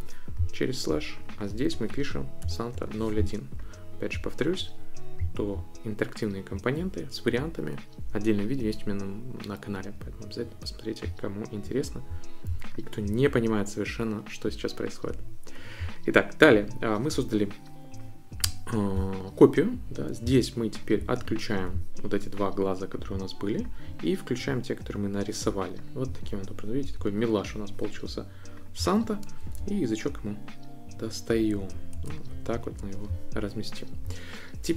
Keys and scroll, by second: 1.7 Right, 2.2-3.4 typing, 29.6 shift+Down, 32.3 shift+Up.